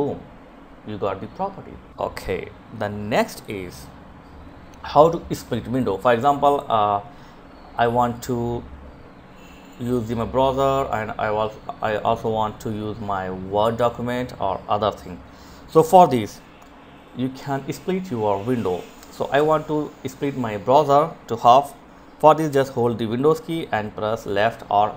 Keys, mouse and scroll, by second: 1.2 click, 23.8 super+Left.